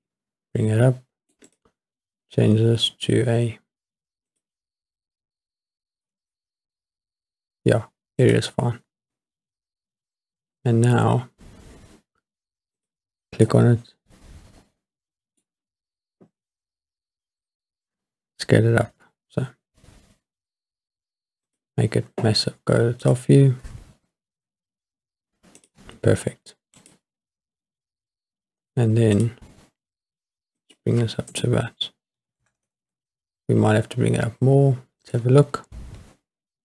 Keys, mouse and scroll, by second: 1.5 click, 4.3 click, 8.2 click, 12.8 click, 13.4-15.4 middle drag, 18.8 s, 21.5 click, 23.0 click, 24.4 s, 25.6 click, 26.8 click, 29.2 click, 30.6-32.8 drag, 32.6 KP_0, 35.4 click.